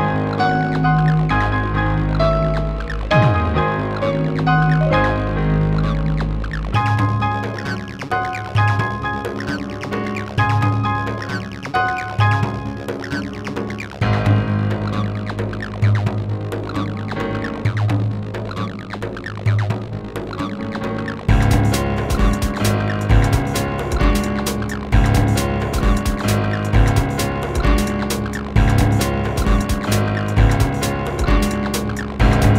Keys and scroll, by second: 1.1 5, 2.2 space.